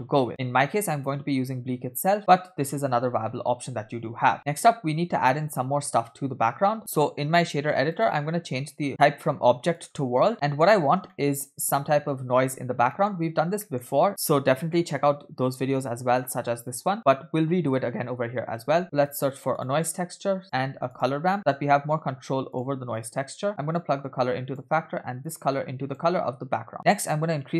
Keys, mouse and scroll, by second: 3.0 space, 3.9 space, 4.1 space, 4.3 scroll down 1, 4.8-6.3 scroll up 2, 6.8-8.1 drag, 6.8 middle click, 6.8-7.4 scroll down 2, 8.9-9.9 drag, 10.3 middle click, 10.3-10.6 scroll down 5, 11.1 middle click, 12.9 middle click, 13.4-13.9 scroll down 2, 13.6 middle click, 14.1 shift+a, 20.7 shift+a, 23.8-24.6 drag, 25.3-26.3 drag, 26.7 middle click, 26.7-27.5 scroll up 5.